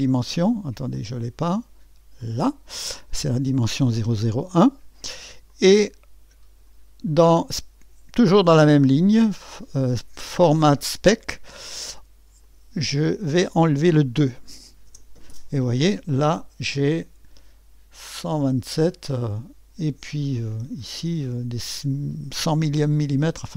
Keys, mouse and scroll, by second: 1.0 click, 2.2 click, 5.5-6.7 drag, 12.4 click, 13.1 click, 14.9 BackSpace, 18.7-20.6 drag.